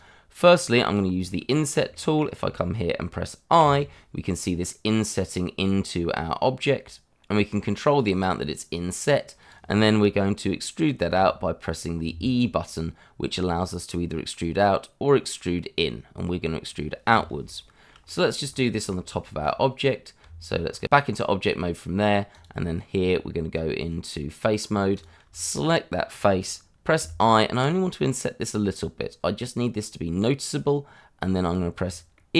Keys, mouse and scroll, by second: 1.3 middle click, 2.1 shift+middle click, 3.6 i, 9.4 click, 11.1 e, 16.6 click, 17.0-17.4 scroll down 1, 17.4 shift+middle click, 18.7 shift+middle click, 18.9 scroll up 1, 19.2 shift+middle click, 20.2 Tab, 22.3 click, 22.9 Tab, 24.9 click, 25.4 shift+middle click, 25.4 middle click, 25.5 shift+middle click, 26.0-27.0 scroll up 1, 27.0 i, 31.4 click, 32.1 middle click.